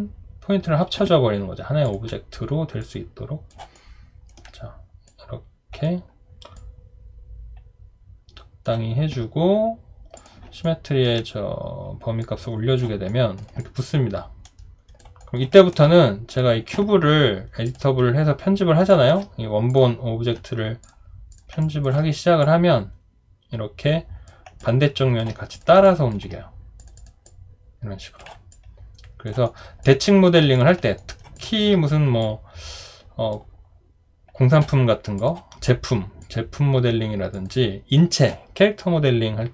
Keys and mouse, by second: 3.7 alt+right click, 10.6 alt+right click, 13.1 alt+right click, 13.6 alt+click, 15.2 alt+right click, 15.5 alt+middle click, 18.9 alt+click, 21.6 alt+click, 24.6 alt+click, 25.8 alt+click, 28.5 alt+click, 29.4 alt+right click, 29.8 alt+click, 31.0 alt+right click, 31.4 alt+click.